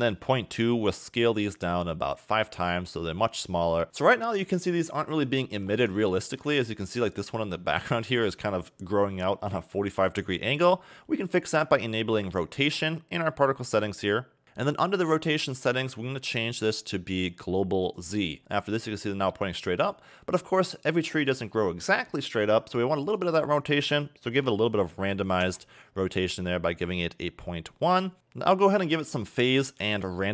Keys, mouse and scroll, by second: 3.8-4.5 scroll down 7, 6.0 shift+middle click, 6.6 scroll up 3, 7.2 scroll up 3, 14.3 click, 15.6 click, 23.2 click, 28.8 click.